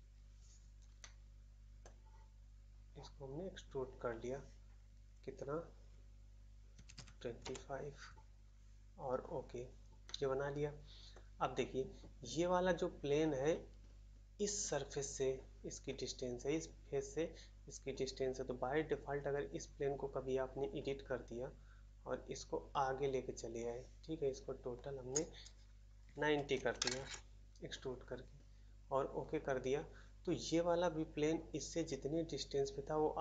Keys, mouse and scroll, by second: 0.9 middle click, 1.8 middle click, 7.4 Return, 7.4 typing, 10.0 middle click, 11.1 middle click, 15.9 scroll up 1, 26.9 Return, 26.9 typing.